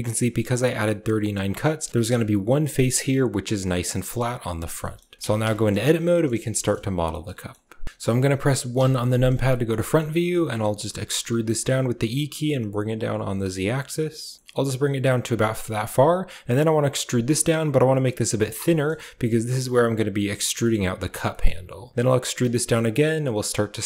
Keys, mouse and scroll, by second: 0.7 shift+middle click, 4.7 shift+middle click, 5.0 middle click, 5.2 Tab, 5.4 shift+middle click, 5.6 click, 6.0 shift+click, 6.2 click, 6.4 shift+click, 6.9 shift+click, 7.2 click, 7.8 ctrl+w, 8.6 KP_1, 9.4 shift+click, 10.2 shift+click, 10.6 e, 14.3 g, 16.3 e, 18.6 shift+click, 20.3 g, 21.2 shift+click, 22.0 e.